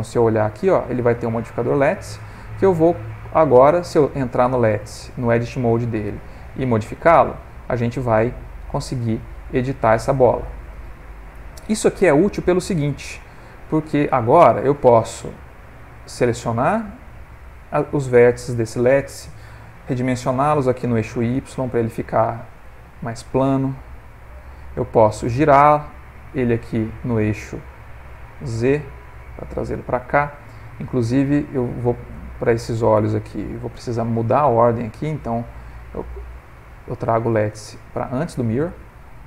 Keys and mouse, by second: 1.4 middle click, 1.9 ctrl+middle click, 2.3 middle click, 2.9 ctrl+middle click, 3.7 click, 4.3 Tab, 4.7 middle click, 5.5 click, 6.1 g, 9.3 middle click, 11.0 middle click, 12.0 middle click, 14.2 middle click, 14.8 middle click, 15.7 s, 16.8 a, 17.4 middle click, 18.1 middle click, 19.9 s, 22.1 middle click, 24.2 click, 25.3 r, 28.2 g, 33.0 Tab, 33.3 click, 35.4 click, 36.8 click, 39.1 middle click.